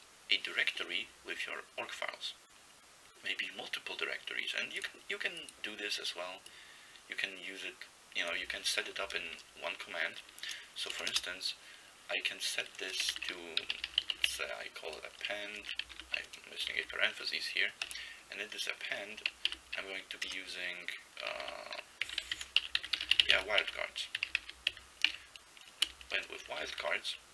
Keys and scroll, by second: 9.3-11.1 typing, 12.9-14.8 typing, 16.0 typing, 16.8 ctrl+b, 17.9 Return, 19.5 typing, 21.5-27.3 typing.